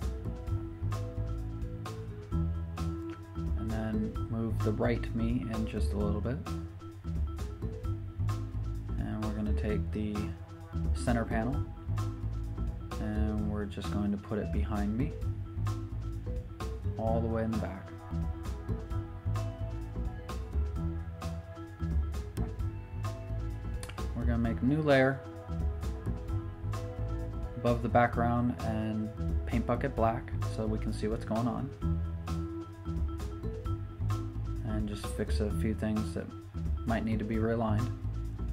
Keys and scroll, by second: 4.1 Return, 6.3 v, 6.5 Down, 7.1 Up, 15.6 super+t, 25.2 Return, 29.2 shift+super+n, 29.4 Return, 35.1 v, 35.4 super+t.